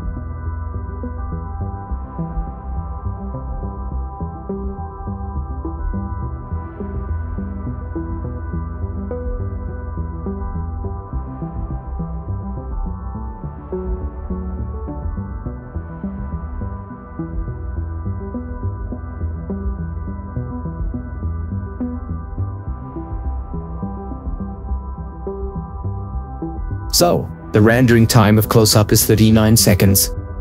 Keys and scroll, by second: 1.6 8, 2.0 Return, 3.9 BackSpace, 4.0 Return, 13.0 ctrl+4, 22.1 ctrl+4, 28.9 ctrl+4.